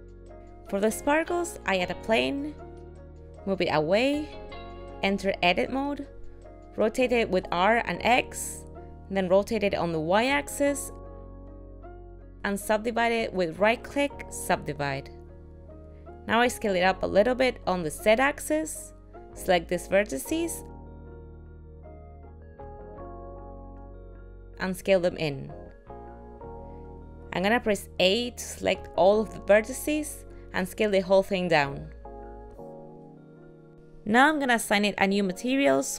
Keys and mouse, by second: 1.7 shift+a, 3.8 g, 5.3 Tab, 6.9 r, 10.3 r, 14.0 right click, 17.6 s, 20.6 click, 24.6 s, 29.4 a, 31.3 s.